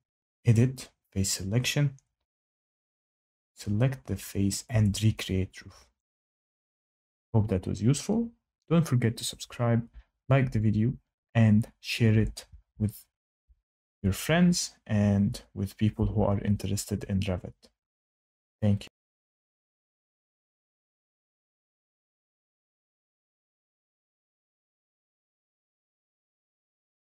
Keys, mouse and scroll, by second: 0.5 click, 3.4 click, 4.8 click, 15.6 click, 17.6 Escape, 25.7 shift+middle click, 26.8 shift+middle click.